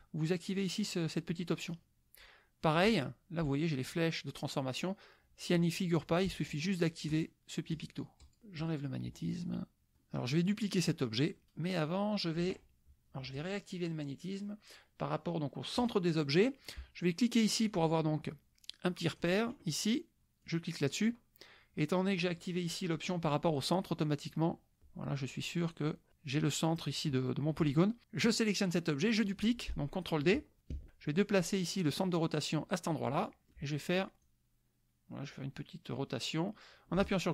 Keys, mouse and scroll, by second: 0.8 click, 1.5 click, 6.5 click, 7.1 click, 7.7 click, 8.2 click, 8.6 click, 9.9 click, 11.3 click, 13.4 click, 15.8 click, 17.7-19.4 drag, 20.4-24.9 drag, 28.2 click, 30.7 ctrl+d, 32.0-33.5 drag, 34.2-37.3 drag.